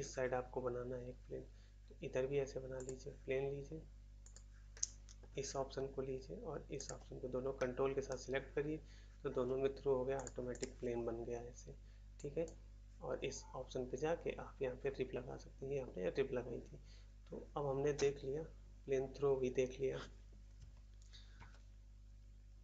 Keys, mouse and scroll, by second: 2.7 click, 2.8 click, 4.1 click, 4.3 click, 4.7 middle click, 5.2 middle click, 6.7 ctrl+click, 7.5 middle click, 8.0 middle click, 10.1 click, 10.2 click, 10.6 click, 12.1 click, 12.4 click, 21.3 shift+s.